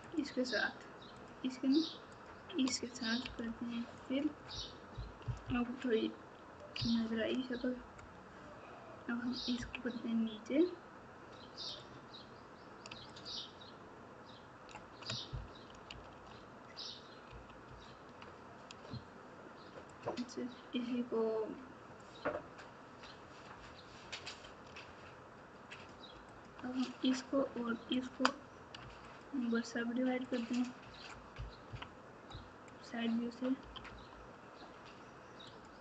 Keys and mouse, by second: 2.1 shift+click, 3.2 f, 3.9 click, 6.7 KP_3, 9.5 KP_2, 11.6 click, 13.1 shift+click, 17.2 ctrl+z, 19.8 shift+click, 25.7 shift+click, 26.3 click, 27.9 shift+click, 30.2 click, 31.6 KP_3, 33.6 g.